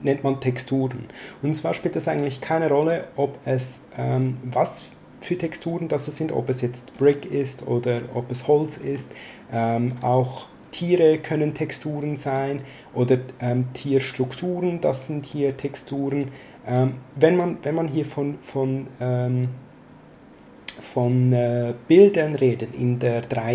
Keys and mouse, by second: 2.4 click, 9.8 click, 12.2 click.